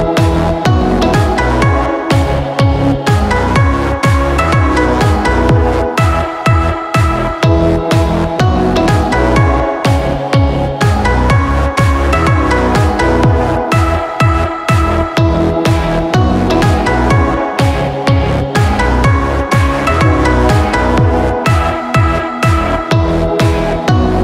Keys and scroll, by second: 0.4 ctrl+KP_Subtract, 1.1 KP_Subtract, 12.0 ctrl+t, 12.8 ctrl+alt+shift+t.